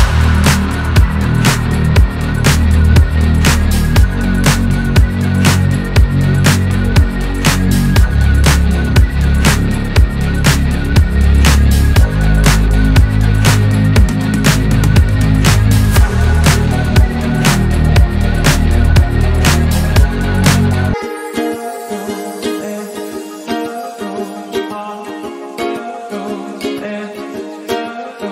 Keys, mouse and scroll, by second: 0.2 g, 0.8-1.5 scroll down 2, 1.2 click, 1.5-1.9 scroll up 4, 1.9 click, 2.4 g, 3.9 click, 3.9 g, 5.2 click, 5.4-5.8 scroll down 5, 5.8-6.2 scroll up 1, 6.2 shift+middle click, 6.6 scroll up 2, 6.8 shift+middle click, 7.3 click, 7.8 g, 8.6 click, 8.7 scroll down 1, 8.9 shift+middle click, 9.5 scroll up 2, 9.7 shift+middle click, 10.2 scroll up 1, 10.4 click, 10.9 g, 11.8 g, 12.3 click, 12.8 s, 13.8 click, 13.9 scroll down 1, 14.1 shift+middle click, 14.5-15.1 scroll up 3, 14.7 shift+middle click, 15.1 click, 15.4 g, 16.1 click, 16.2 scroll down 4, 16.4 shift+middle click, 17.0 scroll up 2, 17.3 shift+middle click, 17.6 click, 18.1 g, 19.2 click, 19.9 s, 21.2 click, 21.2 scroll down 1, 21.5 shift+middle click, 22.0-22.4 scroll up 3, 22.4 shift+middle click, 23.0 scroll down 1, 23.2 shift+middle click, 25.5-26.1 scroll up 2, 26.1 shift+middle click, 26.4 scroll up 1, 26.6 click, 27.0 s, 27.8 g.